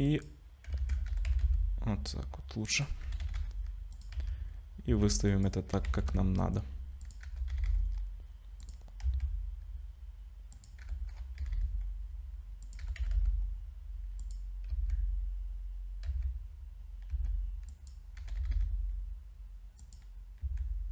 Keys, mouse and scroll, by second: 0.8 ctrl+z, 1.1 g, 3.0 g, 4.2 z, 4.9 s, 5.7 g, 7.2 g, 9.0 s, 10.8 g, 12.8 g, 14.7 z, 16.1 z, 17.1 s, 18.2 g, 20.4 s.